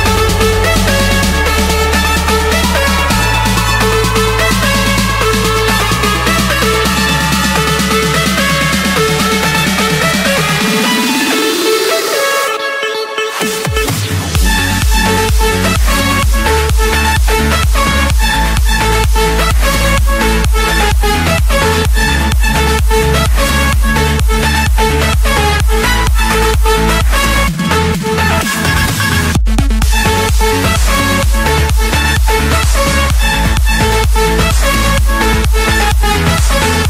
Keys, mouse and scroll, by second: 0.1 Escape, 1.2-2.3 drag, 2.8-5.7 typing, 5.9 Return, 7.2-7.7 scroll, 8.1 scroll, 9.5-10.4 scroll, 10.4 scroll, 11.7 scroll, 13.0-14.1 drag, 14.1-15.2 right drag, 15.3-16.4 drag, 17.2-18.3 drag, 18.4-20.2 middle drag, 21.1 c, 22.1 Return, 24.0 click, 25.8 click, 26.3-26.9 scroll, 27.1 Escape, 31.9 click, 32.8 click, 34.7-35.7 drag.